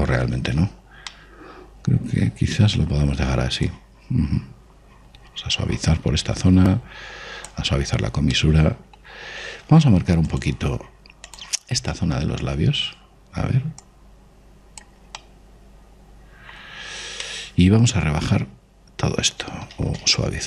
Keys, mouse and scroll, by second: 1.4 ctrl+z, 1.9-5.4 middle drag, 4.5 click, 8.6-12.1 middle drag, 11.1 click, 12.8-14.5 middle drag, 14.7 click, 16.0-17.9 middle drag, 18.1-20.0 middle drag.